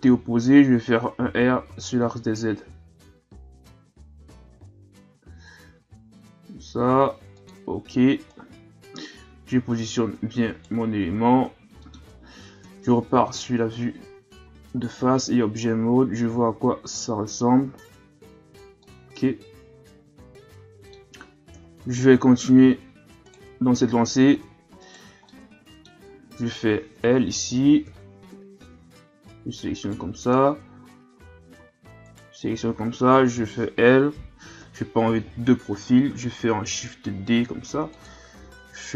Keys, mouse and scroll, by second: 1.2 r, 8.3 right click, 11.8 middle click, 12.6 KP_1, 13.1 a, 14.0 Tab, 14.4 a, 14.8-15.7 scroll down 4, 15.7-17.1 scroll down 3, 17.1-17.8 scroll up 5, 18.8-21.5 middle drag, 21.5 KP_3, 22.7 shift+scroll down 1, 23.2 right click, 24.2 Tab, 24.8 right click, 25.3-27.0 middle drag, 27.0 l, 27.9 l, 29.8 right click, 30.8 a, 31.1 a, 31.6 a, 32.0 right click, 33.4 l, 34.6 KP_3, 35.5-35.9 shift+scroll down 1, 35.9-36.3 scroll up 1, 36.6 shift+d, 38.4 r.